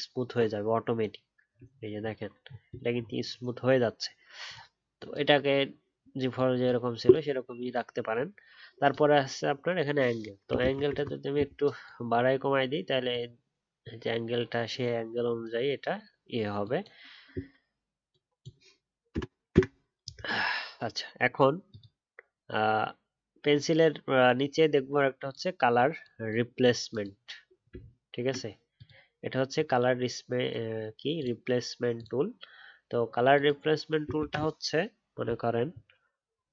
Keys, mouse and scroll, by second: 1.6-2.0 alt+scroll up 3, 2.4 alt+scroll down 1, 27.7 alt+scroll down 2, 28.1-28.7 alt+scroll up 1.